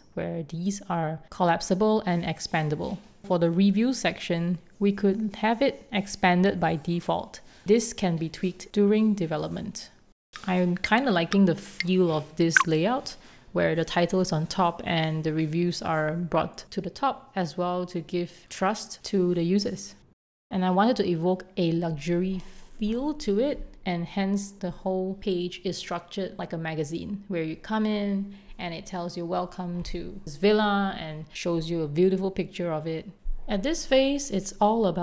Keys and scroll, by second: 1.2 super+v, 7.0 super+z, 7.2 Right, 9.8 Left, 14.3 Escape, 16.6 2, 16.7 Return, 17.3 super+s, 22.4-23.6 typing, 25.6-26.7 typing, 28.4 BackSpace, 32.3 alt+super+c, 33.2 alt+super+v, 34.4 alt+super+c, 34.6 4, 34.7 Return.